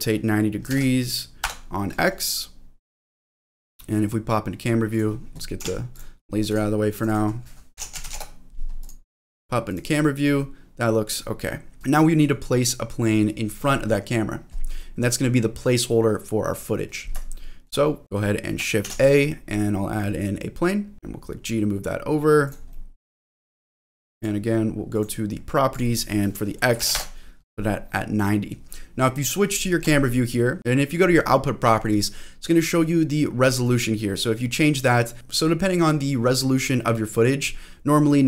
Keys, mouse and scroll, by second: 1.9-3.1 middle drag, 4.9 click, 5.6 g, 5.9 click, 6.5 click, 6.9-8.1 drag, 8.8 click, 9.7 click, 11.0 click, 11.8 click, 11.8 scroll down 2, 12.1 middle click, 14.8 middle click, 17.3 shift+middle click, 17.8 middle click, 18.0 scroll down 2, 18.8 shift+a, 20.9 shift+middle click, 20.9 g, 22.4 click, 22.7 middle click, 23.6 g, 24.1 click, 24.9 click, 25.7-27.4 drag, 29.8 click, 30.6 click, 33.6-35.2 drag, 35.2 ctrl+z.